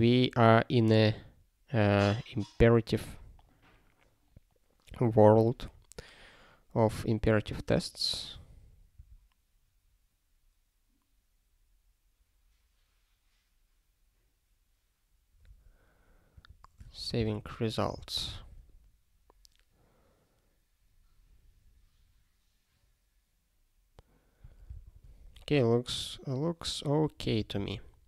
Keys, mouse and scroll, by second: 8.9 ctrl+a, 16.3 click, 16.8 shift+1, 17.7 ctrl+s, 17.9 ctrl+g, 18.8 ctrl+s, 27.4 ctrl+n, 27.5 ctrl+n.